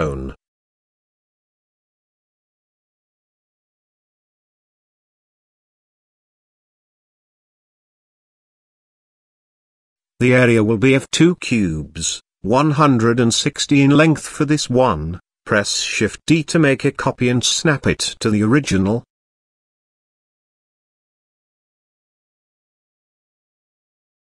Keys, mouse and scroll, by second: 0.4 g, 3.4 g, 5.4-5.7 shift+middle drag, 5.8-6.6 middle drag, 6.8 shift+middle click, 7.3 middle click, 7.7-8.3 shift+middle drag, 9.4 middle click, 11.0 click, 12.0-13.4 drag, 14.3 g, 16.2-17.0 middle drag, 18.6 shift+d, 22.5 g.